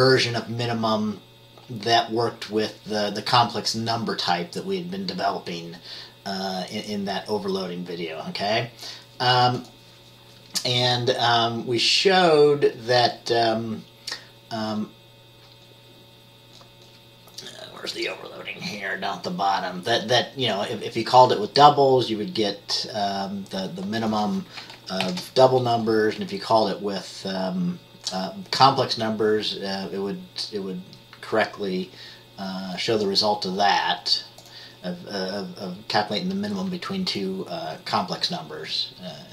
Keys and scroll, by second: 25.1 ctrl+b.